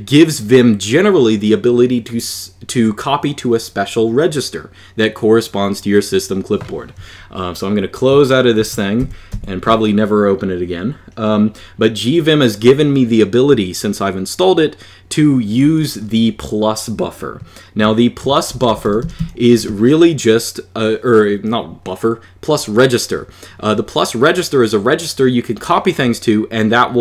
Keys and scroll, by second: 8.4 super+q, 8.7 super+Page_Up, 9.1 super+Page_Up, 18.3-18.9 typing.